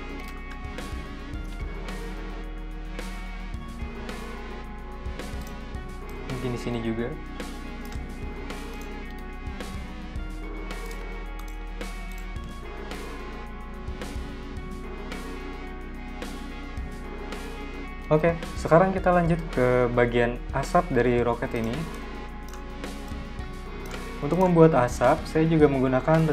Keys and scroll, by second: 7.4 v, 8.9 p, 10.9 v.